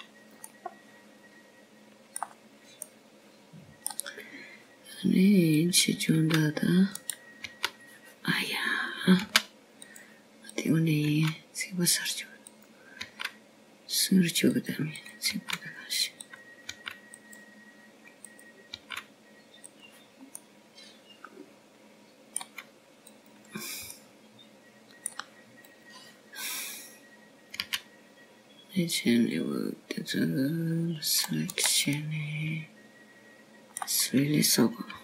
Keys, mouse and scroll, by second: 1.2 click, 3.3 middle click, 5.7 middle click, 8.4 click, 9.0 g, 10.1 right click, 12.2 g, 13.4 click, 14.0 g, 15.4 click, 15.9 g, 17.8 click, 18.2 g, 19.1 click, 19.7 g, 21.2 click, 21.6 g, 23.3 middle click, 26.1 click, 26.8 middle click, 28.6 click, 30.5 c, 34.8 middle click.